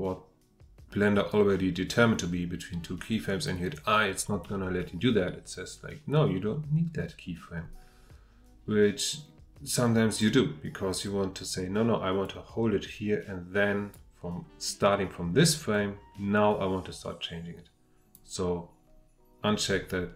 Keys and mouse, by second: 12.2-13.9 drag, 15.7-18.1 drag.